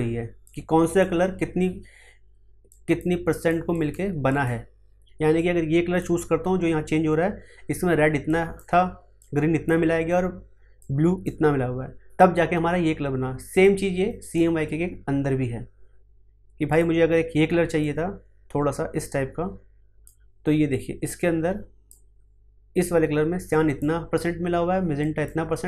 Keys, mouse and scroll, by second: 8.2-15.2 drag, 16.6-25.0 drag.